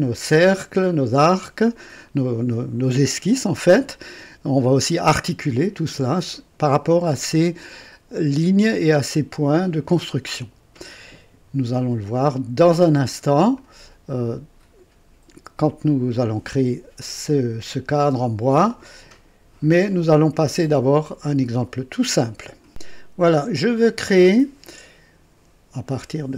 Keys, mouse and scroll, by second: 13.5 click, 22.7 click, 23.7 click.